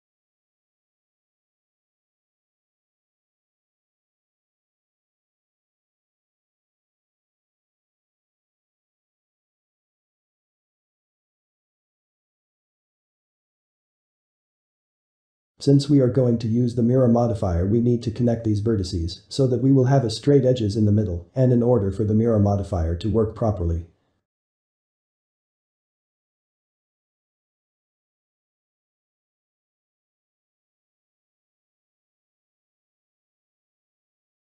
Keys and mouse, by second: 4.4 click, 7.3 click, 8.5 ctrl+KP_Add, 9.8 r, 13.2 click, 13.6 shift+click, 14.1 1, 14.8 ctrl+z, 15.1 2, 16.2 click, 16.8 click, 17.5 shift+click, 17.9 2, 18.6 shift+middle click, 19.3 `, 19.9 ctrl+middle click, 20.5 click, 22.8-24.0 ctrl+middle drag, 24.0 alt+a, 26.0 ctrl+z, 26.9 alt+a, 28.2 ctrl+z, 28.8-31.8 ctrl+middle drag, 31.8 shift+click, 33.7 ctrl+z, 34.2 ctrl+click.